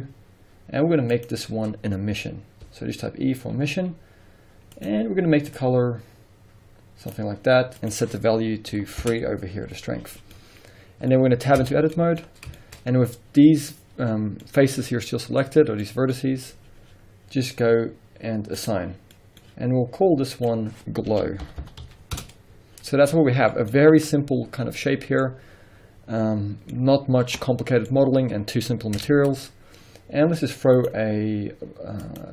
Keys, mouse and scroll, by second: 1.2-4.9 drag, 3.0 e, 7.8-10.4 drag, 9.1 Return, 10.4-18.6 middle drag, 11.7 Tab, 12.2-12.6 scroll up 2, 12.8 scroll up 1, 14.2 scroll down 1, 18.6 click, 19.1-20.4 middle drag, 20.4-23.1 drag, 22.2 Return, 23.0 scroll down 2, 23.1-30.8 middle drag, 27.9-29.0 scroll up 1, 29.0 Tab, 30.8 click, 32.0-32.3 drag.